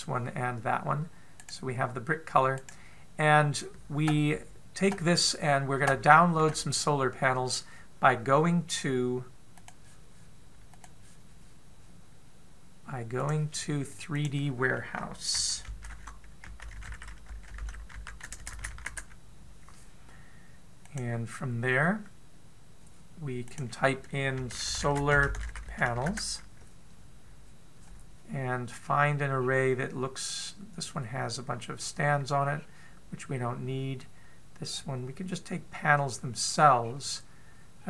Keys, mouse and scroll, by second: 2.0 right click, 3.2 right click, 3.7-6.2 scroll up 2, 6.2 scroll up 1.